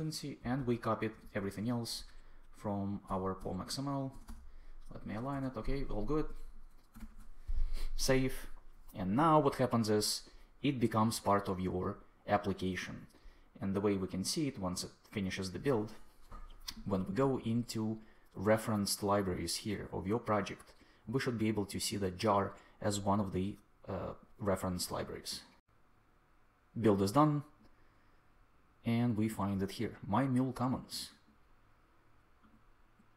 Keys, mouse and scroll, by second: 0.3 Up, 0.5 Tab, 1.0 super+Tab, 1.1 super+v, 3.0 Tab, 4.0 Tab, 5.2 Return, 6.9 super+s.